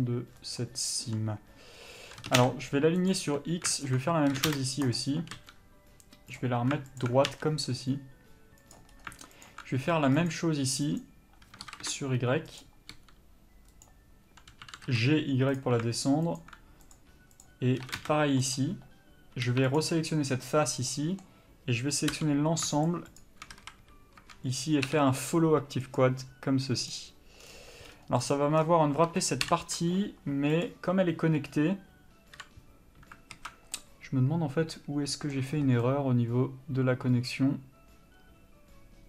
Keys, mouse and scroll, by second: 2.2 s, 3.8 alt+click, 4.3 s, 4.9 click, 5.4 g, 7.0 alt+click, 7.3 g, 8.6 click, 9.4 alt+click, 11.6 s, 12.9 g, 16.4 alt+click, 17.8 s, 19.5 3, 19.8 click, 20.7 scroll down 1, 20.9 middle click, 22.1 l, 22.9 shift+click, 23.5 a, 26.9 u, 28.3 click, 29.4 ctrl+l, 30.7 click, 32.4 l, 33.3 alt+a, 33.7 middle click.